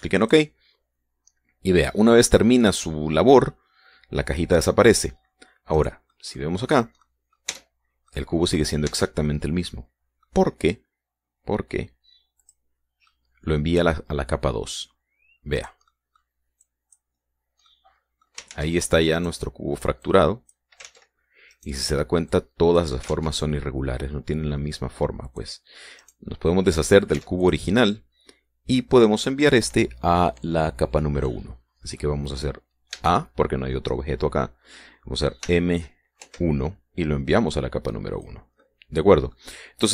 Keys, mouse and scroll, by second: 0.8 click, 6.4 middle click, 6.7 middle click, 7.1-7.6 scroll up 1, 7.6 middle click, 8.1 Tab, 8.1-8.7 scroll up 1, 8.7 middle click, 8.8 click, 9.5 Tab, 9.5 middle click, 9.9-11.0 drag, 13.0 click, 13.7-15.5 drag, 16.2 click, 16.5 click, 17.2 click, 18.3 click, 19.1 ctrl+z, 20.7 click, 21.5 ctrl+z, 22.1 click, 22.9 click, 23.7 ctrl+z, 25.9 click, 26.6 right click, 27.8 x, 28.0 click, 29.9 click, 30.7-32.8 drag, 33.5 a, 36.1 m, 36.8 1, 38.8 click, 39.2 middle click.